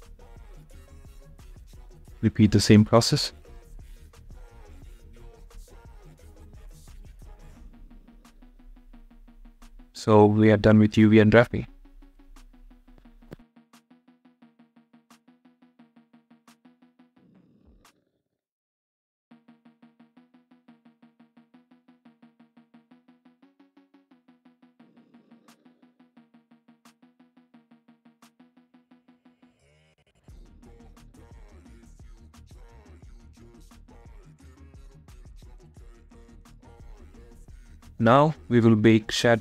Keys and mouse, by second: 5.6-8.9 middle drag, 18.7 shift+middle click, 19.1-21.0 middle drag, 21.7 middle click, 22.0 click, 38.6 click.